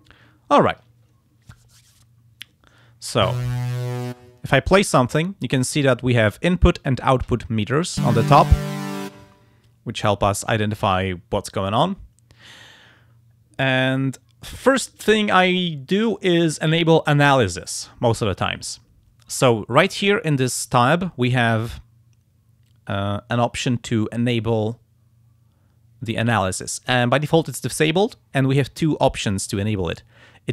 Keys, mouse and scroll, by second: 24.7 click.